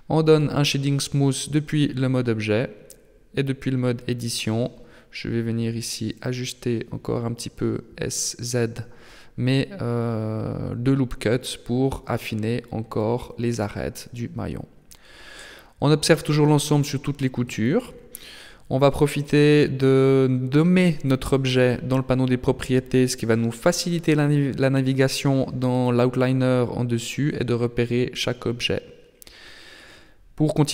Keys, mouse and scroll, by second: 1.7-2.0 scroll up 3, 2.1 Tab, 4.0 g, 6.7 s, 9.1 Tab, 9.8 middle click, 10.9 middle click, 14.1 middle click, 15.7 KP_7, 16.5 scroll down 6, 18.1 click, 18.9 click, 30.4 m.